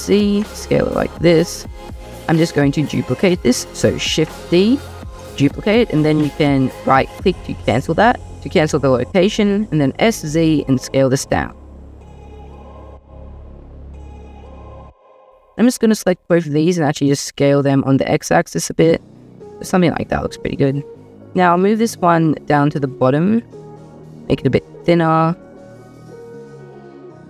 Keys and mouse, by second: 2.9 shift+click, 3.7 shift+d, 9.6 s, 9.8 z, 14.5-15.6 drag, 16.6 s, 16.8 z, 17.5 x, 21.4 g, 21.5 z, 23.2 click, 23.5 s, 23.6 z, 24.6 g, 24.7 z, 27.0 click.